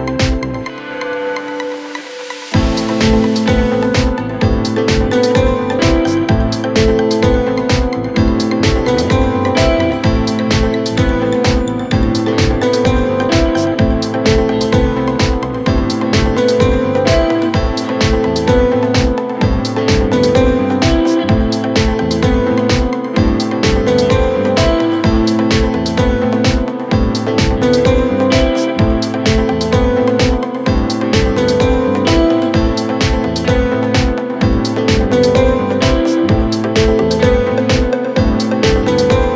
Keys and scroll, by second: 29.9 F3.